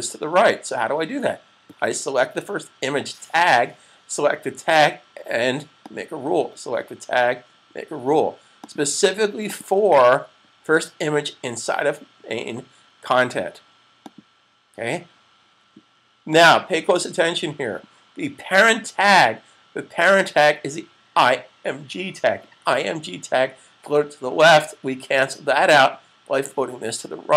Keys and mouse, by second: 5.9 click, 8.3 click, 14.0 click, 25.5 click.